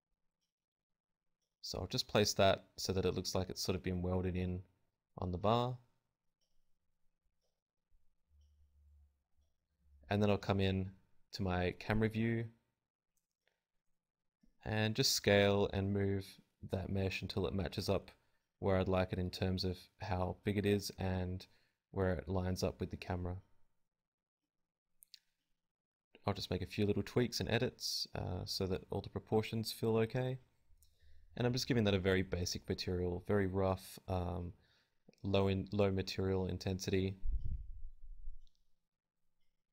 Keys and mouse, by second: 0.3 a, 0.3 t, 0.9 t, 1.1 Tab, 1.4 ctrl+z, 2.1 ctrl+shift+z, 2.1 KP_1, 2.4 alt+s, 3.1 g, 3.8 Tab, 4.6 a, 5.1 KP_Divide, 5.8-9.7 typing, 6.2-8.7 drag, 9.1-10.1 drag, 10.8 KP_1, 11.1 KP_3, 11.2 z, 11.9 s, 13.4 right click, 13.8 z, 14.0 g, 14.2 KP_0, 16.2 s, 17.2 right click, 17.4 Tab, 18.5 right click, 19.7 z, 19.9 z, 19.9 b, 20.0 g, 20.5 Tab, 21.6 Tab, 22.1 g, 22.5 click, 22.6 Tab, 22.7 KP_0, 22.9 click, 23.3 a, 23.9-25.6 drag, 24.2 right click, 27.1 click, 28.4 click, 29.4-31.0 drag, 31.3-33.6 drag, 34.7-37.3 drag, 38.4 click, 39.4-39.7 drag.